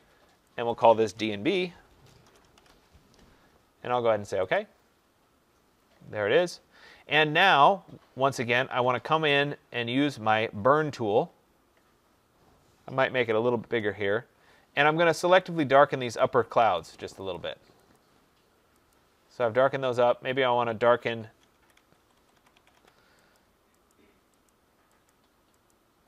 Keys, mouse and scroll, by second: 0.6 click, 1.4 d, 2.1 shift+7, 2.5 b, 4.4 click, 10.8 click, 13.1 ], 13.6 ], 15.5 click, 16.1 click, 16.7 click, 17.3 click, 17.9 click, 21.5 click, 21.5-22.6 typing, 23.3 click, 23.8 click, 24.4 click, 25.0 click, 25.6 click.